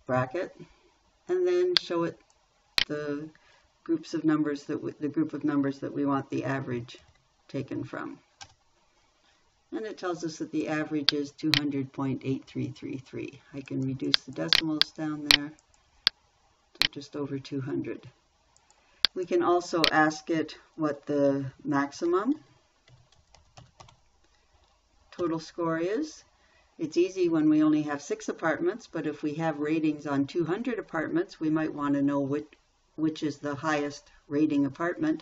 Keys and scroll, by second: 0.0 shift+9, 7.4 shift+0, 8.8 Return, 22.5-24.2 typing, 25.6 Right.